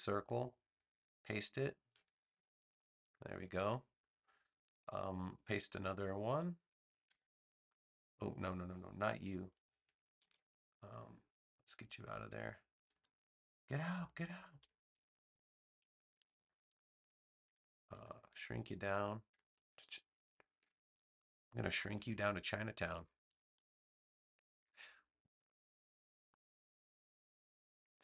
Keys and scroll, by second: 2.2 shift+super+v, 7.0 super+v, 10.1 super+z, 12.9 BackSpace, 14.5 BackSpace, 16.1 super+c, 16.3 super+v, 22.0 super+z, 22.8 v.